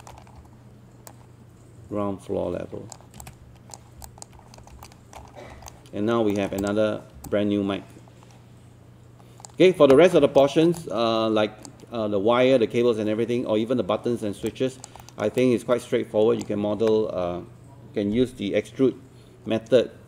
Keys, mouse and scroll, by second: 0.2 scroll up 1, 1.1-4.0 drag, 4.4-4.7 scroll up 1, 4.9 alt+middle click, 5.3 scroll up 1, 5.7 alt+middle click, 6.3 alt+middle click, 6.6 click, 7.3-9.5 alt+drag, 10.4 alt+middle click, 10.8 alt+click, 14.5 alt+click, 15.4 alt+click.